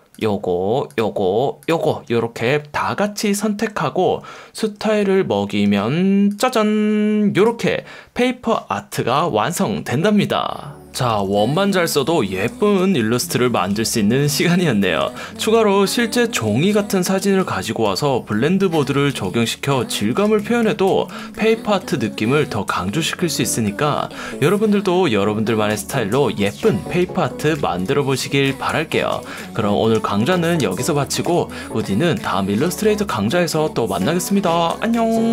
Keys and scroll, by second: 4.6 F1, 5.7 F1, 8.9 super+0, 11.1 super+-, 12.3 space, 12.8 super+space, 22.7 super+\, 28.7 super+0, 29.1 super+-, 29.9 super+\, 31.3 space.